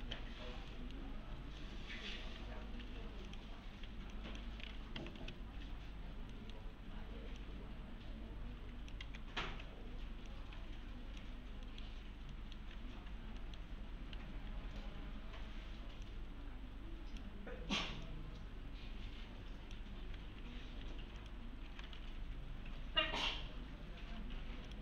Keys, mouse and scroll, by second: 0.0-0.5 typing, 0.5 scroll down 1, 0.7 middle click, 1.2 scroll up 1, 1.6-2.2 alt+middle click, 2.2-3.3 typing, 3.3 click, 4.1 click, 4.7-5.7 typing, 5.7-6.3 scroll down 1, 6.3 middle click, 7.4-8.9 click, 9.0 x, 10.3-11.2 click, 11.4 scroll down 1, 11.7 middle click, 12.6-13.4 scroll up 1, 13.4 middle click, 13.6-14.1 scroll down 1, 14.1-14.9 typing, 16.1-17.3 click, 20.2 1, 21.2 click, 21.4-22.5 typing, 24.4-24.8 typing, 24.7 click.